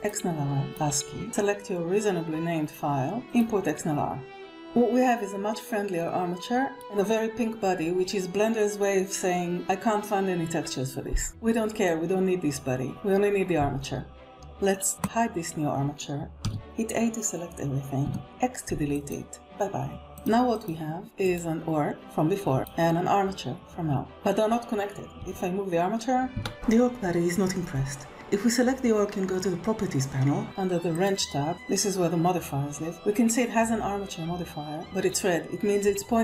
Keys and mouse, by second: 0.9-3.0 drag, 5.2-7.4 middle drag, 15.8 click, 17.5 a, 18.6 x, 23.8 click, 24.9 click, 25.3 g, 26.4 Escape, 30.4 click.